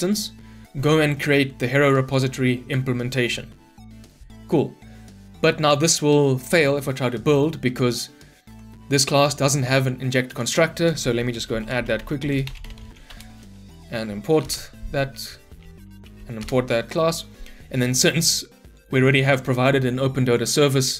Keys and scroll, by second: 8.5 ctrl+b, 13.0 Return, 14.5 alt+Return.